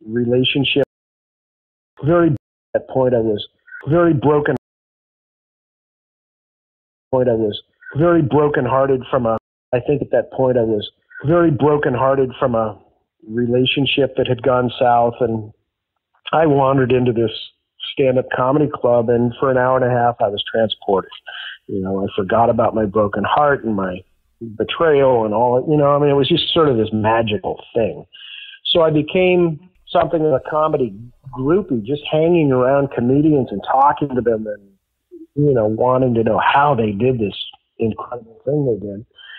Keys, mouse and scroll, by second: 1.4 ctrl+shift+Delete, 1.9 space, 2.3 space, 2.6 click, 2.6 space, 4.5 space, 4.6 click, 5.6 click, 7.0 click, 7.0 space, 8.6 ctrl+s, 9.3 space, 9.6 click, 9.6 space, 17.4-18.5 drag, 18.9 click, 22.2 click, 23.1 click, 23.8 click, 26.1 click, 27.1-28.6 drag, 29.3-30.8 drag, 31.1 click, 32.2-33.7 drag, 34.0 click, 35.2 click, 36.1-37.1 drag, 37.4 click, 38.1 ctrl+s.